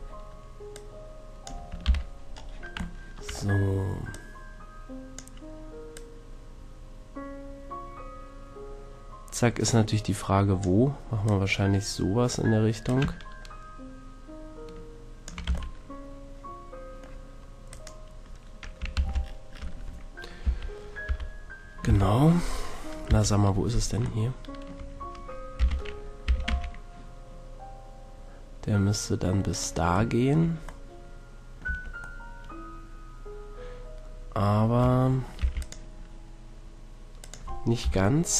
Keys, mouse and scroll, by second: 1.8 ctrl+KP_3, 4.1-7.8 drag, 11.2-14.7 drag, 15.4 a, 15.8-16.8 middle drag, 17.7-19.2 right drag, 18.9 ctrl+l, 20.4 KP_3, 21.0 KP_1, 21.8 ctrl+KP_3, 23.1 ctrl+KP_1, 25.6 z, 26.2 e, 29.6 click, 30.1-31.6 middle drag, 31.6 Tab, 32.4-35.6 middle drag, 34.8 Tab, 35.4 ctrl+r, 37.3 click, 37.8 KP_7.